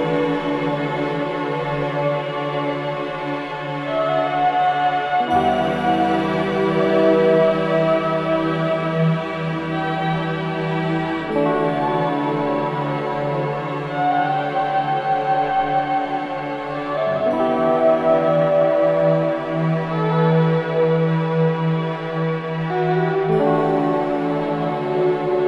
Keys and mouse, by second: 0.1 Escape, 0.7-1.1 typing, 1.7 Escape, 2.1-3.3 typing, 4.6 Escape, 7.8 click, 8.9 click, 11.4 g, 13.5 click, 14.3 click, 15.7 typing, 17.2 click, 19.8 alt+shift+click, 20.6 click, 21.7-22.1 typing, 23.3 click, 24.3-24.8 typing.